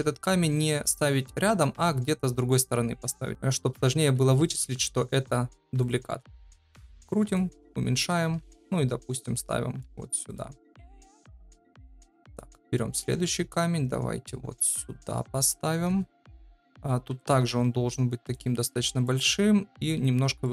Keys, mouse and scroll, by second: 0.4 g, 3.3 x, 4.4 shift+d, 6.1 r, 7.5 s, 8.2 g, 9.0 middle click, 9.8 g, 11.3 KP_7, 13.1 shift+d, 15.8 KP_0, 16.7 s, 17.4 g, 20.4 middle click.